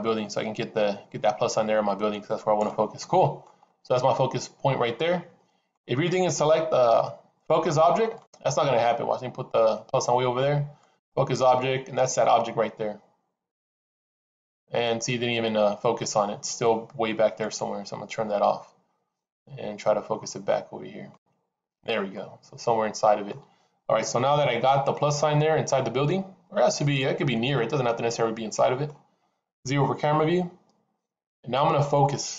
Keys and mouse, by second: 2.9-3.4 middle drag, 3.9-5.6 middle drag, 8.1-9.9 drag, 10.7-14.2 drag, 17.2 click, 19.1-21.8 drag, 22.1-23.2 middle drag, 24.9-28.8 middle drag, 29.5 KP_0.